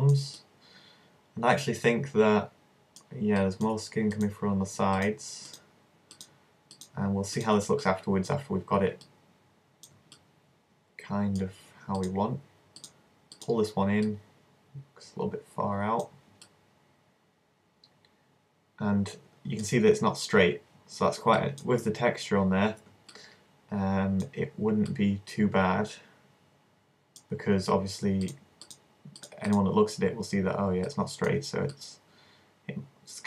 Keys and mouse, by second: 2.1-11.0 middle drag, 12.0-14.5 right drag, 14.1 click, 14.5-16.0 middle drag, 18.2 middle click, 21.5-25.5 middle drag, 26.7-30.9 middle drag, 30.9 right click, 31.7-32.9 middle drag, 32.7 click.